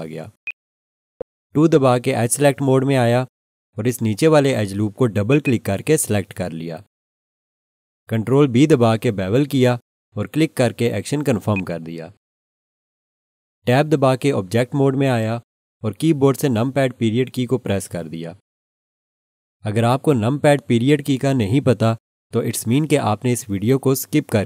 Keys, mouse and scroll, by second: 0.4 alt+shift+click, 1.0 scroll up 1, 3.1 2, 5.3 click, 5.4 double click, 9.3 ctrl+b, 11.5 click, 14.7 Tab, 18.0 ..